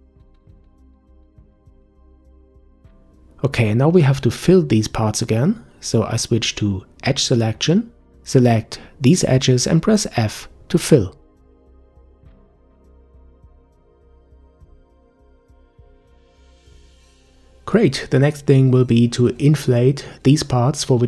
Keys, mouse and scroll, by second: 0.2 click, 0.7 Delete, 2.3 click, 2.8 Delete, 4.0-5.1 middle drag, 5.1-7.3 scroll up 3, 7.3 click, 8.4 click, 8.9 shift+click, 9.9 shift+click, 10.3 f, 10.7 middle click, 11.3 click, 11.8 shift+click, 12.3 f, 14.7 Tab, 14.9-15.6 scroll down 7, 15.6-16.6 middle drag, 16.8-17.9 middle drag, 17.9-19.2 scroll up 1, 19.7 click.